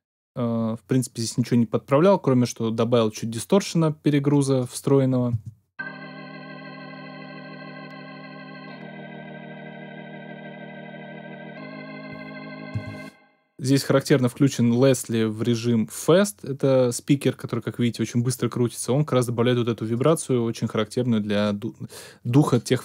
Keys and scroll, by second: 5.3 space, 12.7 space.